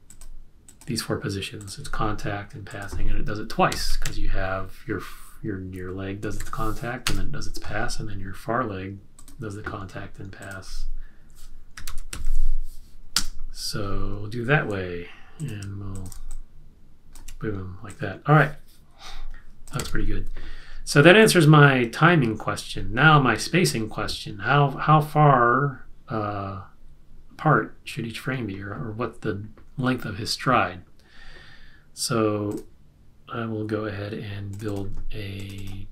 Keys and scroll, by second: 3.4-6.8 typing, 7.0 Return, 11.5-12.7 typing, 13.1 Return, 19.7 super+s.